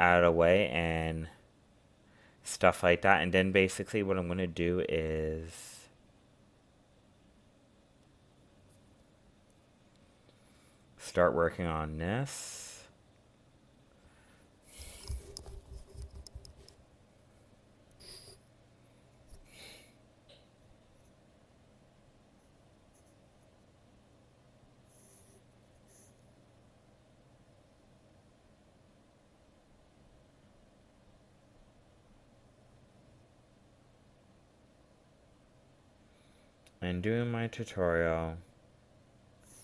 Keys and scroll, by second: 2.9 ctrl+z, 4.4 ctrl+z, 11.7 ctrl+z, 12.9 ctrl+z, 28.8 ctrl+z, 30.0 ctrl+z, 37.3 ctrl+z.